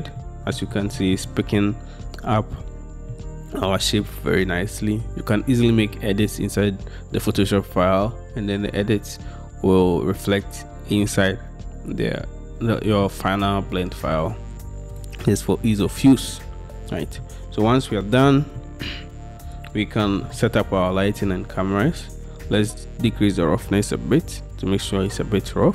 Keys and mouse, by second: 1.1-1.4 shift+drag.